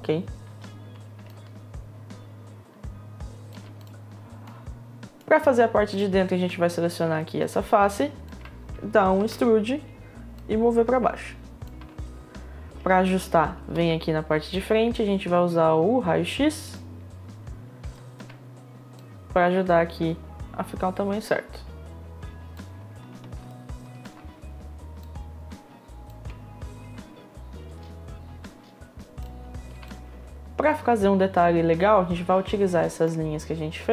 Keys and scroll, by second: 3.1 space, 10.0 e, 12.3 e, 12.8 space, 13.3 space, 17.8 space, 27.5 space.